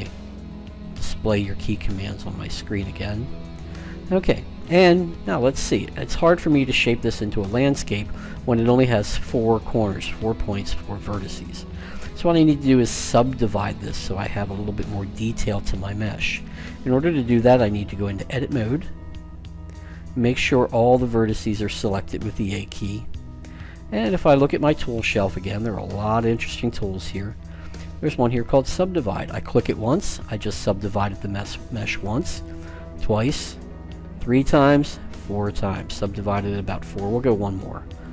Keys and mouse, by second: 1.8-3.3 drag, 3.3-13.9 middle drag, 17.2-21.0 drag, 21.0 a, 21.8 a, 25.0-26.7 drag, 29.5-31.3 drag, 32.2-36.3 drag, 37.8-38.1 drag.